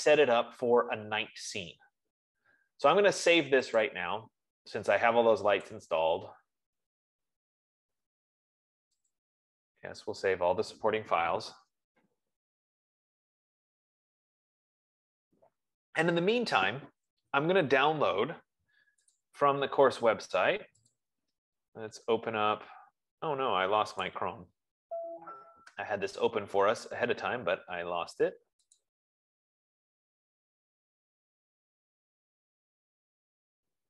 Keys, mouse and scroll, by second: 4.3 click, 6.2 click, 9.7 click, 19.7 click, 21.5 click, 24.5 click, 26.7 middle click, 26.9-27.8 scroll, 27.8 scroll, 29.1 click.